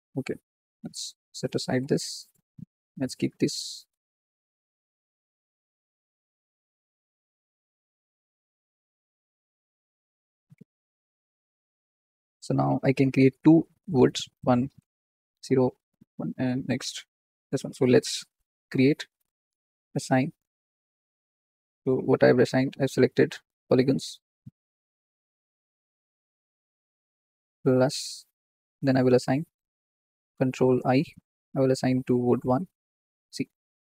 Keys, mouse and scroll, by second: 0.5 click, 1.8 g, 2.6 click, 3.3 g, 4.9 s, 5.6 g, 6.5 click, 7.1 s, 8.6 g, 12.1 click, 15.4-20.9 drag, 20.9-22.0 scroll down 20, 22.0-23.2 shift+middle drag, 23.7 click, 24.6-25.3 scroll up 13, 25.3 shift+middle click, 25.7-26.8 scroll up 5, 26.4 shift+middle click, 27.7 ctrl+KP_Add, 29.5-30.6 drag, 30.6 ctrl+i, 32.0-33.6 drag, 33.6 middle click, 33.6-33.9 scroll down 7.